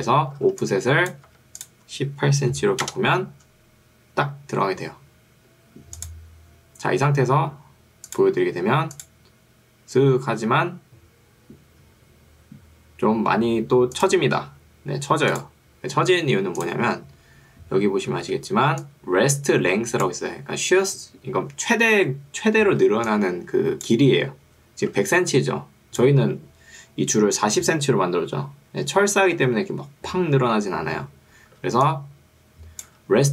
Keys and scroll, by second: 0.5 ctrl+2, 1.3 Escape, 2.5 1, 2.7 8, 2.9 Return, 18.3 ctrl+2, 20.9 Escape, 22.9 ctrl+2, 24.3 Escape, 25.1 ctrl+2, 26.3 Escape, 31.7 ctrl+2, 32.9 Escape.